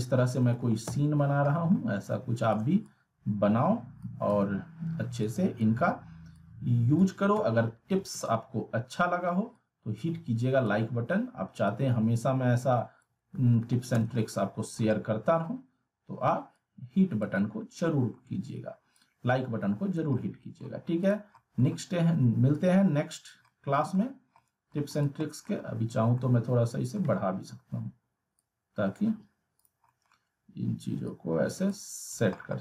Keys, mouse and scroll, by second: 0.4 alt+w, 0.8 z, 1.2 scroll down 1, 1.4 middle click, 1.9 scroll up 1, 2.5-3.2 shift+drag, 4.4 e, 5.2-5.8 drag, 7.3 ctrl+z, 9.5-10.8 click, 10.8 w, 11.7-13.2 drag, 13.3 alt+w, 13.9 z, 14.2-14.8 alt+middle click, 14.9-15.5 alt+middle drag, 16.5-17.7 click, 17.4-18.3 alt+middle drag, 18.9-20.7 click, 20.2 alt+middle click, 21.0 click, 21.4 alt+middle click, 22.5-24.1 click, 23.5 alt+middle click, 24.7-25.5 alt+middle click, 25.0 click, 25.2 middle click, 26.5-27.1 alt+middle click, 27.5 r, 28.4-29.0 click, 29.0 w, 29.6 click, 29.9 middle click, 31.0 click, 31.1-32.0 click, 32.3 middle click.